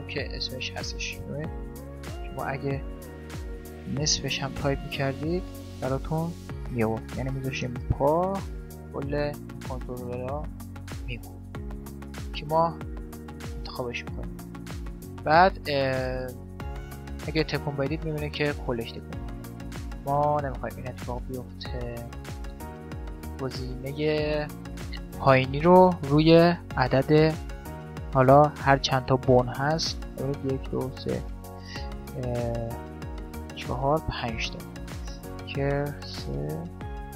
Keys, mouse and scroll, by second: 1.8 BackSpace, 2.2 BackSpace, 2.3 BackSpace, 4.7 BackSpace, 4.9 BackSpace, 14.1-16.6 middle drag, 16.6-18.3 right drag, 21.3 right click, 25.9-28.6 drag, 28.3 z, 28.6-30.7 middle drag, 31.1-34.3 middle drag, 35.0-37.1 drag.